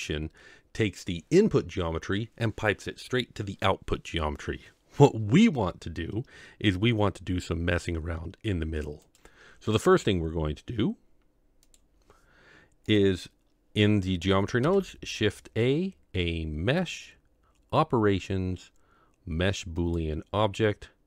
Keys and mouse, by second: 13.0 click, 14.6 shift+a.